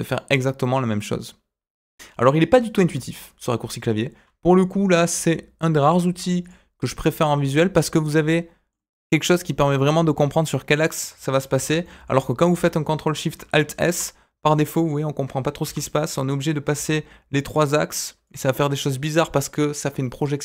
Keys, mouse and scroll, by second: 0.1-2.2 middle drag, 2.8 ctrl+z, 6.4 click, 7.4-8.7 middle drag, 9.7-11.0 drag, 11.5 ctrl+z, 11.8 middle click, 13.1 middle click, 13.7 ctrl+alt+shift+s, 18.5-19.6 middle drag, 19.6 typing.